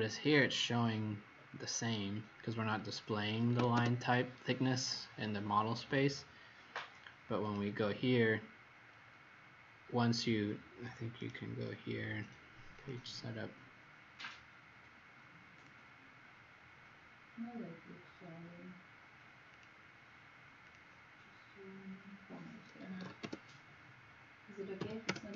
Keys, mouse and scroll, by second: 1.6 scroll down 2, 2.8 scroll up 2, 3.1-4.0 typing, 3.3 scroll up 1, 7.4 click, 8.9 scroll up 2, 11.1 right click, 12.7 click, 22.5-23.7 typing, 24.7 KP_1, 25.0 KP_Enter.